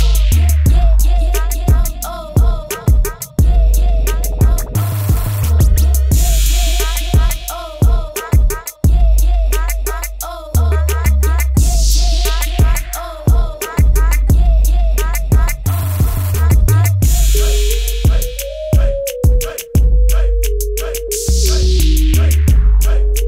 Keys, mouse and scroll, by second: 15.5 click, 17.7 click, 19.1 ctrl+KP_Enter, 20.7 click, 22.0 g.